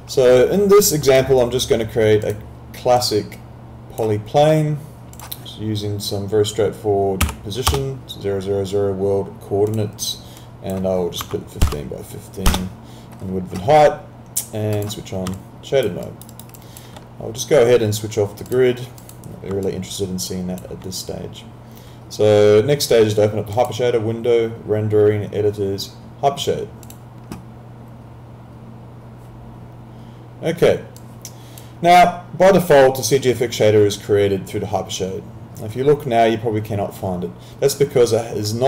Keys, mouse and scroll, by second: 7.2 0, 7.7 Return, 9.7 click, 11.6 5, 12.5 Return, 12.5 KP_Enter, 14.7 click, 15.4 alt+click, 16.0 alt+right click, 16.6 alt+click, 18.5 click, 19.6 alt+click, 23.6 click, 26.9 click, 31.0 click.